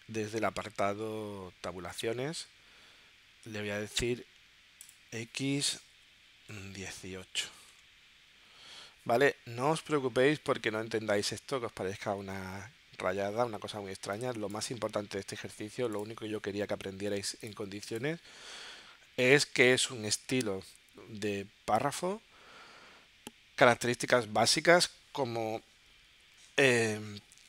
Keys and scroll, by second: 6.0 1, 6.5 8.